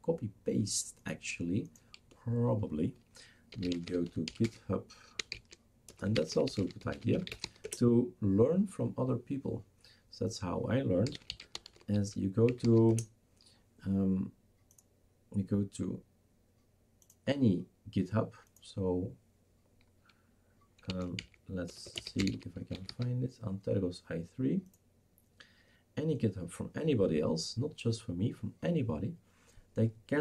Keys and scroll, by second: 3.3-7.9 typing, 11.0-13.9 typing, 20.7-23.3 typing.